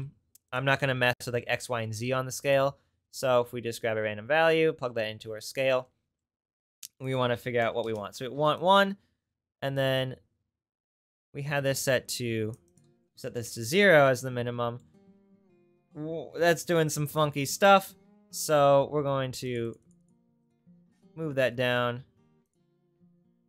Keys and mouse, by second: 0.0 shift+d, 0.3 click, 2.4-3.8 drag, 4.5-5.8 drag, 9.8 click, 10.5 click, 11.1 click, 12.0 click, 17.6-23.4 drag.